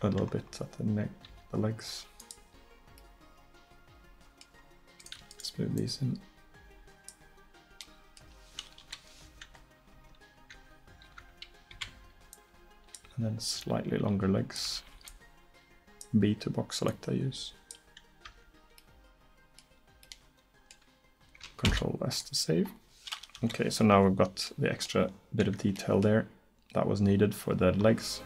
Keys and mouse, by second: 1.3 click, 1.3 s, 7.3 click, 8.9 KP_1, 9.8 click, 10.0 Tab, 10.6 Tab, 11.1 a, 11.8 b, 13.7-15.1 drag, 14.7 a, 15.1 b, 18.0 click, 18.3 Tab, 21.7 ctrl+s, 23.4 KP_1.